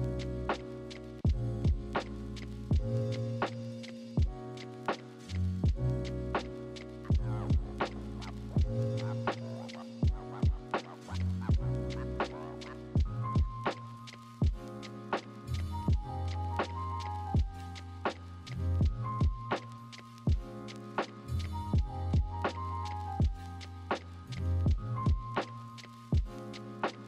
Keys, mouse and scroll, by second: 1.4 ctrl+z, 7.5 ctrl+z, 11.2 ctrl+z, 12.8 ctrl+z, 13.7 ctrl+z, 17.8 ctrl+z, 20.1 ctrl+-, 20.4 ctrl+=, 21.8 ctrl+z, 26.2 ctrl+-, 26.4 ctrl+=.